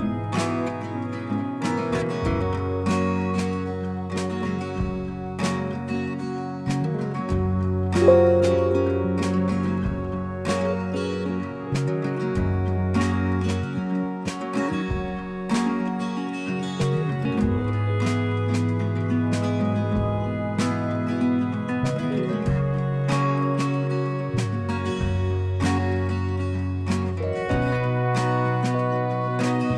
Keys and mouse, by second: 0.7 click, 0.7 click, 2.5 click, 7.5 click, 10.5 click, 13.6 click, 16.2 click, 17.7 click, 19.3 click, 20.9 click, 24.3 click, 25.4 click.